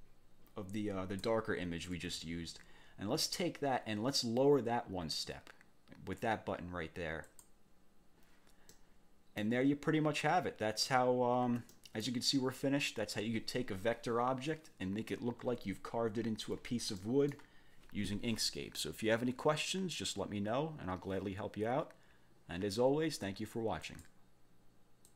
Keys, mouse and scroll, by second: 1.9 ctrl+z, 7.3 click, 8.7 click, 10.9 ctrl+scroll down 2, 11.7 ctrl+click, 15.9 ctrl+scroll up 2, 17.0 click, 23.9 click, 25.1 click.